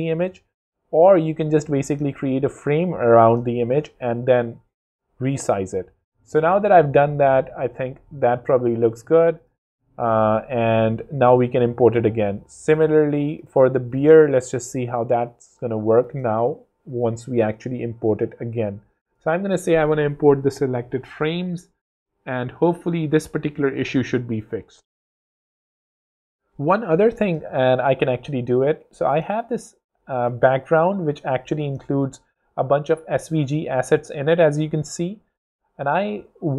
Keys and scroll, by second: 0.1 super+z, 0.8 alt+super+g, 10.9 super+s, 11.2 super+z, 12.0 z, 13.7 space, 15.3 super+Tab, 28.4 super+Tab, 32.4 shift+v, 34.0 alt+shift+super+z, 34.7 shift+super+z, 34.8 super+k.